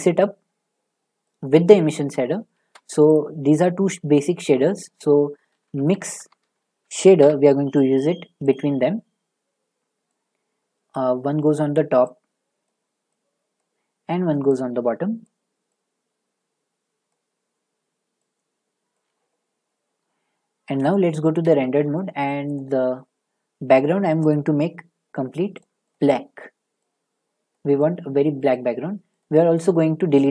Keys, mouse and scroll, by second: 2.0 click, 2.5 a, 3.1 click, 5.8 typing, 7.2 Return, 7.2 BackSpace, 8.5 click, 10.9 click, 13.6 click, 15.2 click, 17.1 click, 18.9 click, 20.8 z, 21.3 z, 21.6 z, 22.5 click, 22.5 z, 24.3 click, 25.6 click, 25.9 click, 27.5 click, 29.2 click.